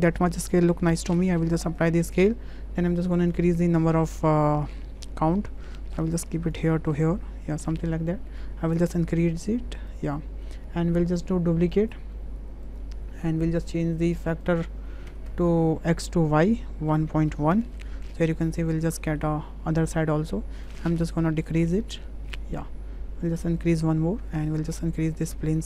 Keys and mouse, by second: 3.1 click, 3.5 click, 3.8 click, 4.5 w, 5.1-6.5 drag, 7.1 click, 8.9 click, 9.3 click, 9.9 click, 11.8-12.8 drag, 14.0 click, 14.6-16.1 drag, 16.5-18.2 drag, 18.9 drag, 20.9-22.4 drag, 23.6 click, 24.9 s.